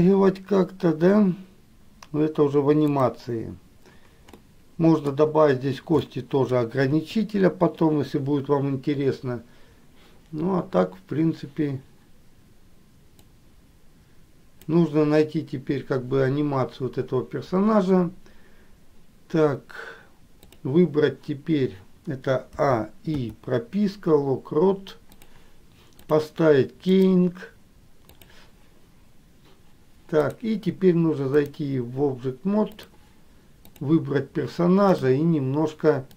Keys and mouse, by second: 4.7 middle click, 6.2 middle click, 7.1 KP_1, 13.7-14.9 drag, 26.3-30.2 drag, 31.5-33.2 drag, 34.1 click, 35.3-36.1 drag.